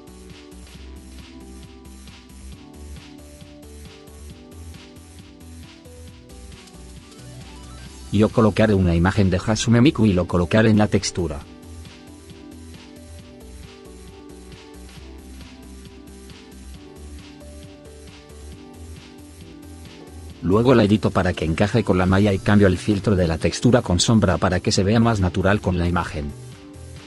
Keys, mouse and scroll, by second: 9.1 click, 9.9 click, 12.5 click, 15.2 right click, 16.6 right click.